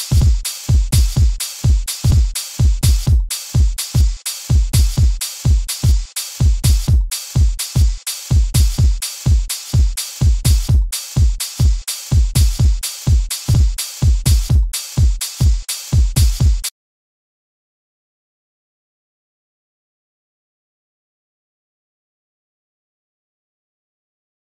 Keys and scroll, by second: 0.1 a, 2.0 a, 3.9 a, 5.8 a, 8.9 super+z, 11.5 a, 13.4 a, 16.6 space, 17.9 super+u, 19.2 super+z.